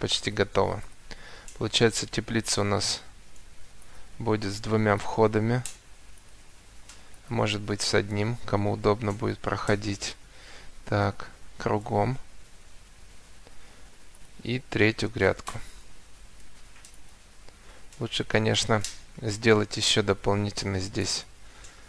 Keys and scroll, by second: 3.9 Escape, 10.7 7, 10.9 0, 11.7 Return, 12.7 Escape, 17.5 Escape.